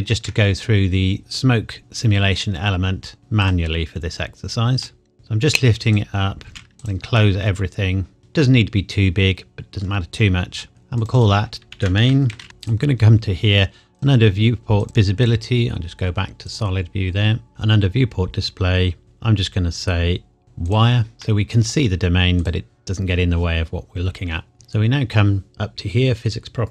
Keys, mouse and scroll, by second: 3.2 z, 3.4 click, 4.8 middle click, 5.1 g, 5.8 click, 6.5 s, 6.7 shift+z, 6.8 click, 7.2 middle click, 8.4 scroll down 1, 9.8 scroll up 1, 10.7 middle click, 11.0 click, 11.7-12.4 typing, 12.6 click, 17.5-19.0 scroll down 1, 19.0 click, 21.2 middle click, 22.4 click.